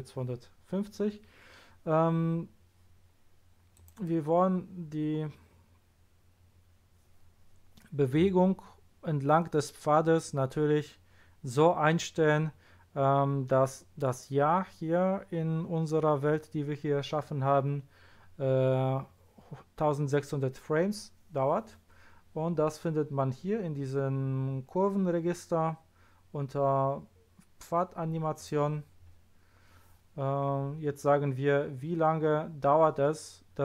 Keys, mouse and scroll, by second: 3.7 click, 5.2-6.5 scroll down 1, 28.3 click, 29.2-29.5 scroll down 1.